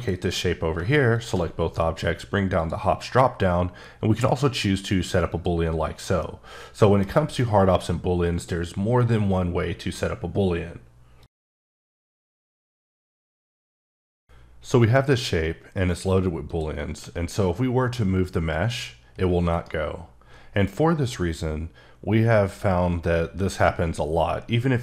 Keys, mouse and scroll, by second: 5.3 click, 6.2 middle click, 16.9 g, 19.5 right click.